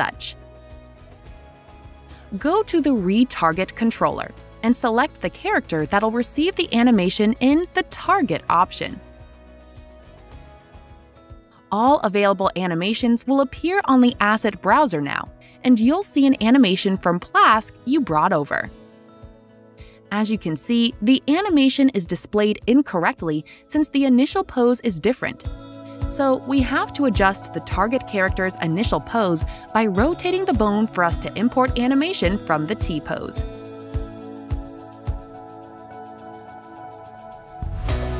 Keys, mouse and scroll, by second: 1.2 click, 2.5 click, 2.5 a, 3.1 click, 3.7 click, 5.5 click, 7.5 click, 9.3 click, 11.0 right click, 11.0 typing, 14.2 click, 14.4 click, 19.0 click, 23.1 click, 25.0 click, 25.6-26.2 typing, 27.3 space, 31.3-33.1 drag, 31.3 typing, 36.7 click, 37.6 click.